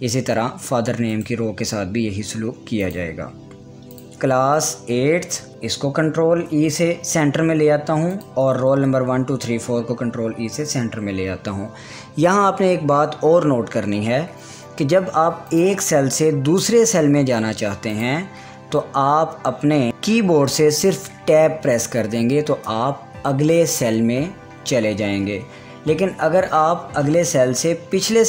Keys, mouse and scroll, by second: 1.7 right click, 3.4 click, 5.5 Tab, 6.6 ctrl+e, 8.7 click, 10.0 Tab, 16.0 click, 17.4 click, 21.9 Tab, 25.8 Tab.